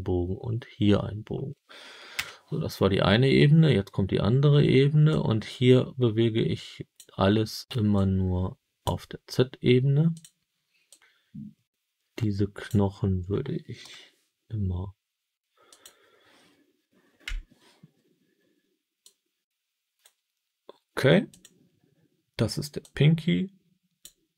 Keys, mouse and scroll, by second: 2.1 KP_1, 5.0-6.9 drag, 7.9 click, 10.0 click, 10.8-12.6 drag, 13.7 KP_7, 15.6 click, 17.1 KP_1, 18.9-19.9 drag, 21.2 click, 22.7-23.9 drag.